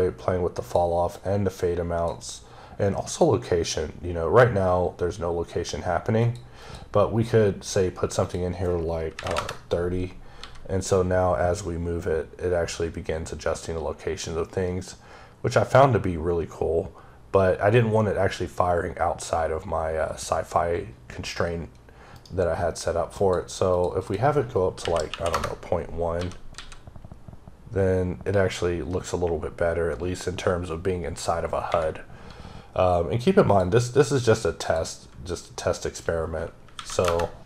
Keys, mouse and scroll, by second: 1.0 click, 2.9 click, 6.1 click, 6.5 click, 8.1 click, 9.0 KP_3, 9.2 KP_Enter, 10.2 g, 23.1 click, 23.6 click, 23.9 double click, 24.7 KP_Decimal, 24.9 KP_1, 25.2 KP_Enter, 26.0 g, 28.7 typing, 31.5 ⊘, 33.3 click, 34.5 click, 36.6 KP_9, 36.9 KP_Enter.